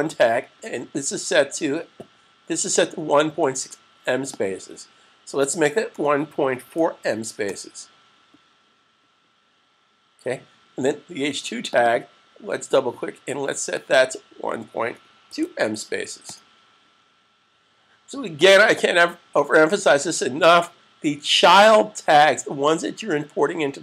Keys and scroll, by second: 6.4 4, 15.0 2, 19.1 s.